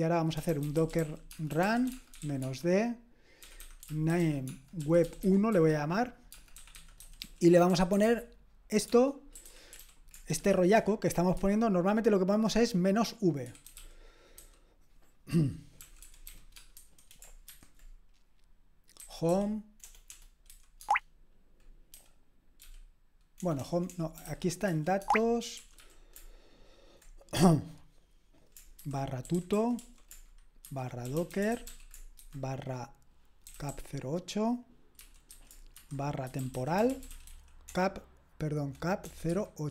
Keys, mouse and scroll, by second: 0.1-10.5 typing.